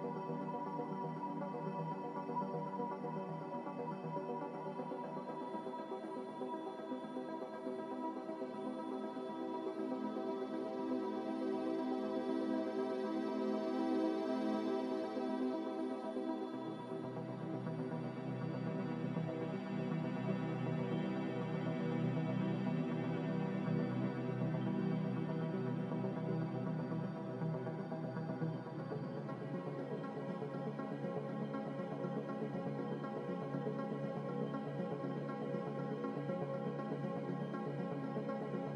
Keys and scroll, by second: 7.0 b, 8.1 Delete, 15.3 a, 18.4 3, 19.1 Return, 25.5 Delete, 28.9 b, 29.8 z, 35.4 m.